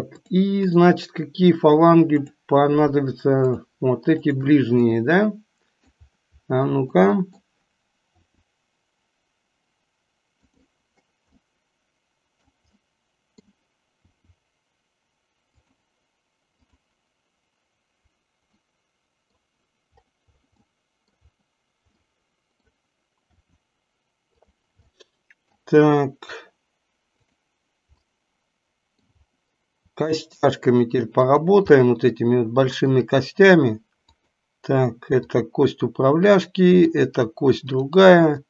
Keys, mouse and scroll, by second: 0.3 click, 2.2 click, 3.5 shift+click, 4.9-6.0 middle drag, 7.0 middle click, 8.3 r, 11.5-12.5 middle drag, 12.8 middle click, 14.0 r, 18.5-19.5 middle drag, 20.7 middle click, 21.9-22.8 middle drag, 23.3 r, 24.9 middle click, 27.3 drag, 28.3-29.3 middle drag, 29.9 r, 31.8-33.0 middle drag, 34.2 click, 35.3 click, 36.4-37.0 middle drag, 37.6 drag.